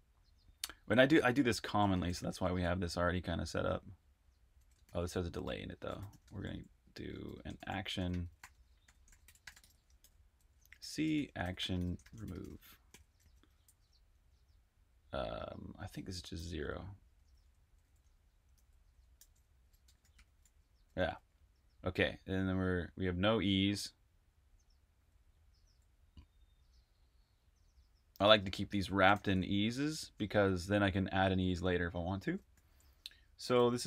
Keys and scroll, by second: 2.1 typing, 3.2-7.1 typing, 8.7-12.3 typing, 14.1 typing, 15.1-20.1 typing, 23.1 typing, 24.6-26.0 typing, 27.7-29.0 typing, 30.5 Escape, 30.5-31.2 typing, 32.5-33.8 typing.